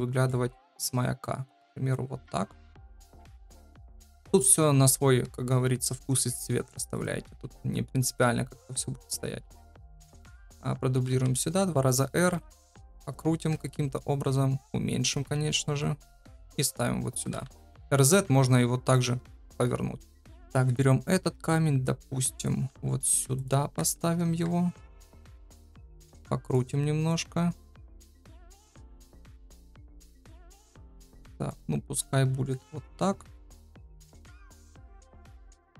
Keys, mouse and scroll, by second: 0.2-2.3 drag, 2.6 middle click, 3.5 KP_7, 9.7 shift+d, 10.9 r, 12.1 r, 13.5 KP_0, 14.1 s, 16.5 right click, 17.2 r, 20.3 shift+KP_7, 20.5 shift+d, 22.6 r, 24.2 KP_0, 25.3 r, 27.2-28.4 drag, 28.7 click, 29.1 r, 32.3 s, 33.6 KP_7, 35.3-35.7 drag.